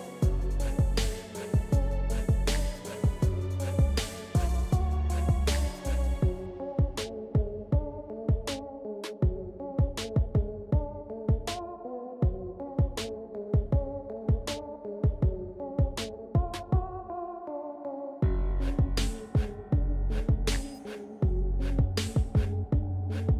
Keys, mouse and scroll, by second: 7.2-12.4 drag, 7.2 typing, 12.3-13.2 typing, 13.2-19.1 drag, 19.2-23.2 drag, 19.2 typing.